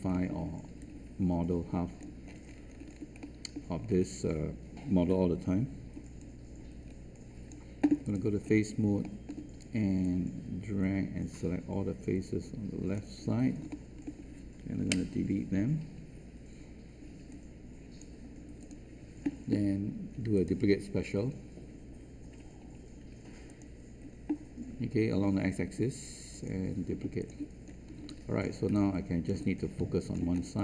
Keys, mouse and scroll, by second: 0.1 alt+middle click, 0.7 click, 2.2 scroll up 1, 2.9-3.2 alt+scroll up 1, 3.8 scroll down 1, 6.1-8.0 right drag, 8.0 click, 8.4-8.8 scroll down 1, 9.0 alt+middle click, 10.0-13.3 drag, 13.6 alt+middle click, 14.8 alt+Delete, 17.2 right click, 18.5-27.1 drag, 27.6-27.9 scroll up 1, 28.3 alt+click, 28.6 alt+space, 28.7 click, 30.3 scroll up 1, 30.5 alt+click.